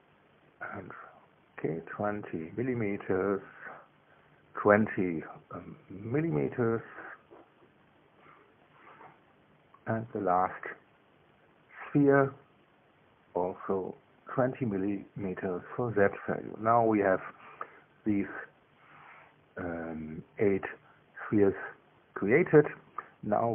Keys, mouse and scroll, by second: 0.7-3.1 typing, 2.4 KP_Enter, 3.9 click, 7.0 click, 8.1 Left, 8.8 Delete, 9.4 Return, 11.8 click, 13.4 click, 14.6 BackSpace, 15.4 Return, 16.8-21.3 drag.